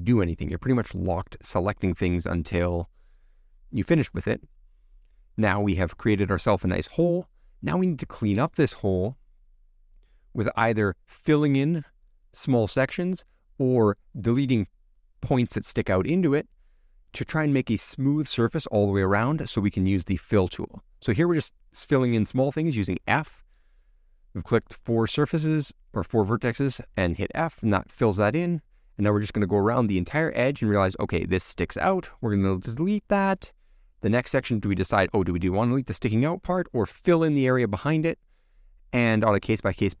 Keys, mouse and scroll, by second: 1.6 click, 2.2-4.0 middle drag, 4.0-4.9 scroll up 1, 4.9-11.1 middle drag, 11.1-12.3 scroll up 2, 12.3 scroll up 1, 12.3 middle click, 13.2-14.9 scroll down 1, 14.9 click, 20.3 shift+click, 21.4 shift+click, 25.2 f, 27.4-30.8 shift+middle drag, 30.8 click, 33.7 x, 34.3-36.6 middle drag, 36.6 click, 39.1 x, 39.8-40.0 middle drag.